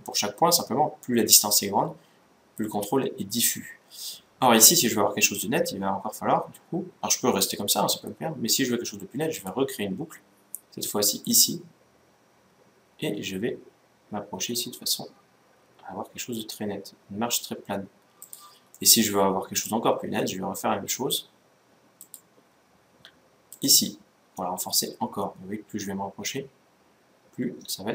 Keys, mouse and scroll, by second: 9.1-10.9 drag, 10.9 click, 18.5-20.0 middle drag, 20.1 middle click, 21.7-23.6 drag.